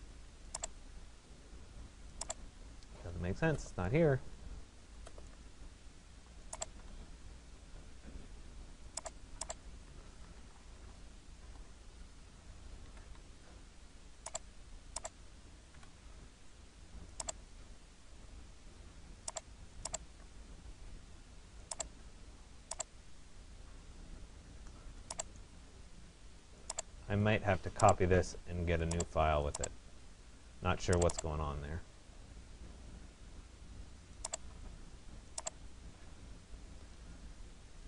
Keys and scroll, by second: 11.0 Return, 13.0 Escape, 15.8 Delete.